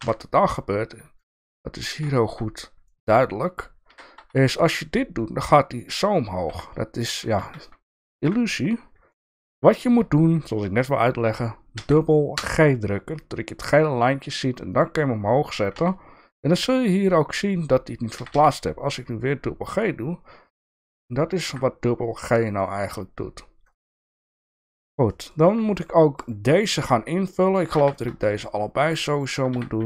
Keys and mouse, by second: 0.0 KP_3, 1.1 shift+middle click, 2.1 shift+middle click, 2.8 shift+middle click, 3.8 g, 7.3 ctrl+z, 8.2 KP_1, 9.1 shift+middle click, 11.7 g, 15.7 KP_3, 18.1 g, 22.2 middle click, 23.9 shift+middle click, 24.3 middle click, 25.1 shift+middle click, 27.3 shift+click, 27.5 shift+click, 27.8 f, 28.0 click, 28.2 shift+middle click, 28.8 shift+click, 29.2 shift+click, 29.5 f.